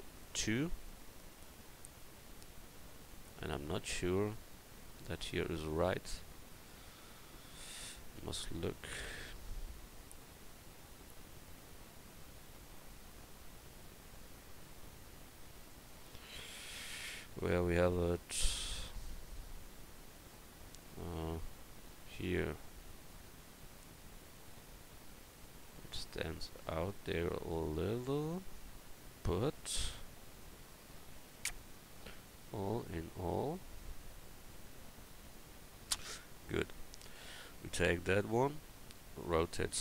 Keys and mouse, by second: 7.5 KP_1, 32.5-33.4 middle drag, 33.9-35.1 middle drag, 35.1 click, 36.5-39.4 right drag, 37.8-39.4 drag, 39.4 r.